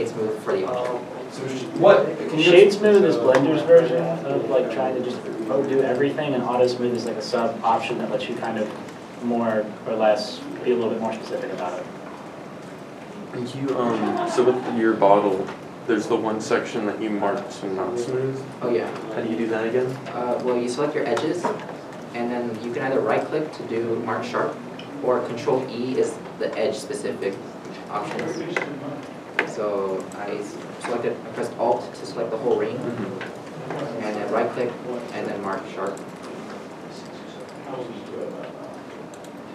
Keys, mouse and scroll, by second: 19.3 Tab, 19.7 scroll, 19.8-20.2 scroll up 1, 21.5 alt+click, 23.2 right click, 25.7 ctrl+e, 29.6 ctrl+2, 30.4-30.9 ctrl+scroll, 32.9 alt+click, 34.4 ctrl+right click, 37.0-39.5 alt+drag.